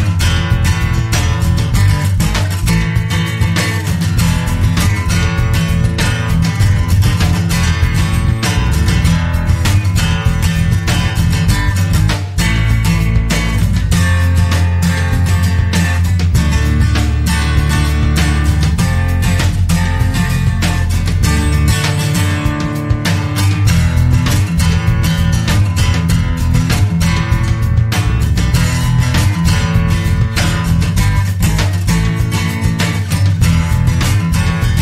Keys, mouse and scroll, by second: 0.3 click, 0.9 click, 3.2 click, 5.8 F2, 6.8 l, 7.3 i, 9.1-10.3 typing, 11.5 click, 12.2 click, 12.7 click, 15.2 click, 16.8 0, 17.5-17.8 scroll down 2, 18.2-18.5 scroll up 2, 18.8 scroll down 2, 19.4-19.8 scroll up 2, 21.5 click, 23.2 click, 26.4 click, 32.6 click.